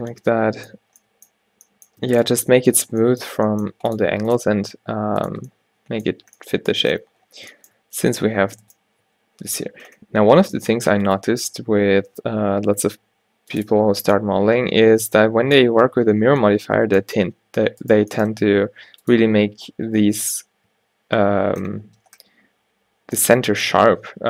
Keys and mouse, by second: 3.5 g, 4.2 r, 4.7 r, 8.3-10.7 middle drag, 10.7 alt+w, 11.2 click, 11.3 g, 13.8 Tab, 16.4 Tab, 17.3 g, 18.4 g, 19.5 Tab, 19.8 a, 20.2 a, 20.8 a.